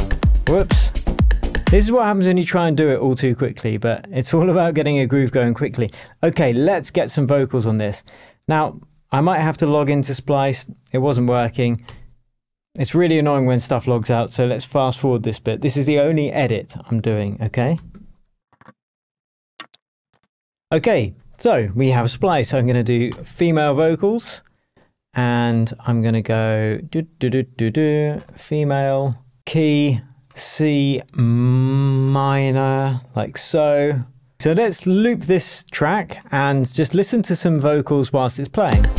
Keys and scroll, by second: 1.8 space, 4.6 super+d, 5.1 super+s, 8.4 super+t, 9.7 ctrl+space, 10.7-11.9 typing, 17.3 w, 17.9 shift+2, 18.4 Tab, 21.7-23.0 typing, 23.0 Return, 38.6 space.